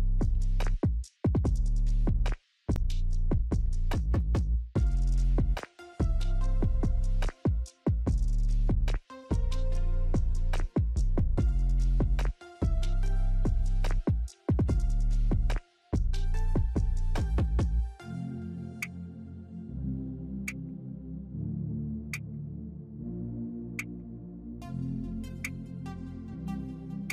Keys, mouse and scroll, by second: 13.1 ctrl+g, 15.8 alt+click, 19.6 click, 22.6 right click, 24.2-27.1 drag.